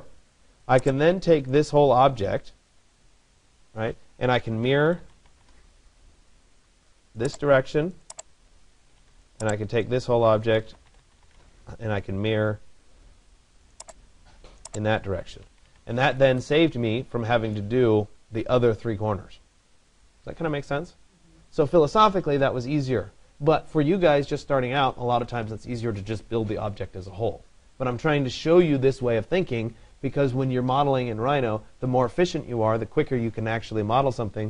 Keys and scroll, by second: 5.1 Return, 15.2 Escape.